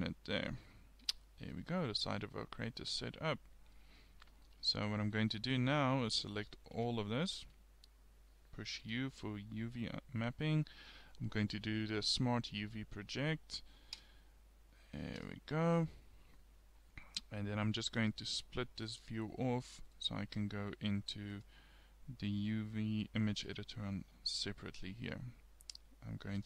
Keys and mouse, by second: 1.1 KP_1, 6.4 a, 6.8 a, 8.9 u, 18.0-20.0 drag, 21.3-23.2 drag, 26.1 click.